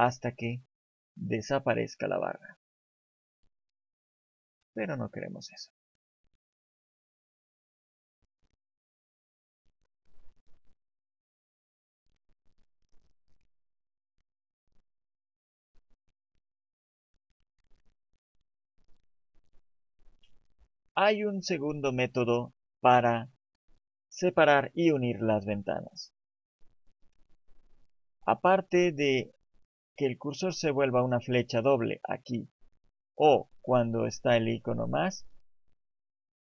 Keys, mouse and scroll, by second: 1.5 click, 5.3 click, 12.2 click, 13.4 click, 15.8 click, 33.5 click, 35.8 click.